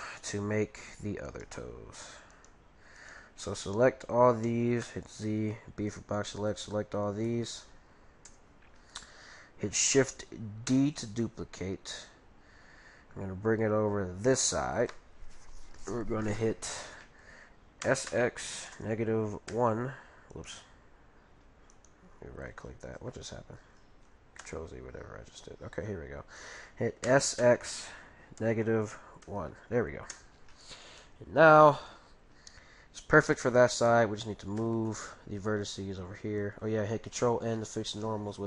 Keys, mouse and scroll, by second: 0.2-5.2 right drag, 4.8 z, 5.3 b, 7.3-8.7 middle drag, 8.9-11.0 middle drag, 18.0 x, 20.4-23.3 right drag, 22.1-24.8 middle drag, 24.4 ctrl+z, 24.9 ctrl+z, 24.9-25.9 middle drag, 27.1 s, 27.6 middle click, 27.9 scroll up 1, 31.0-32.8 middle drag, 34.6 z, 34.9-36.7 middle drag, 37.2 ctrl+n, 38.0-38.4 middle drag.